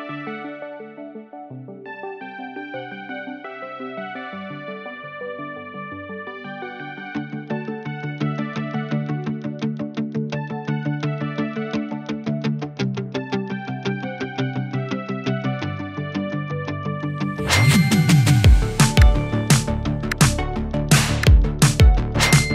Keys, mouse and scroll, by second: 0.9-1.8 scroll up 1, 2.4 click, 4.5 ctrl+d, 5.5-6.1 drag, 8.2 Return, 8.7 Right, 9.2 BackSpace, 9.9 1, 10.1 Return, 11.6 click, 17.4 p, 18.3-22.5 drag.